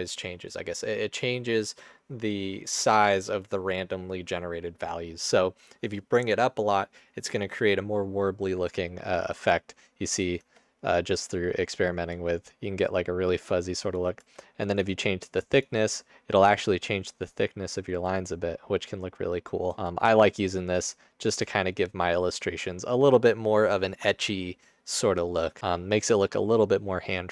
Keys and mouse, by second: 8.8 click, 10.4 space, 12.8-14.1 drag, 14.3 space, 14.6 click, 15.8 space, 21.4 space.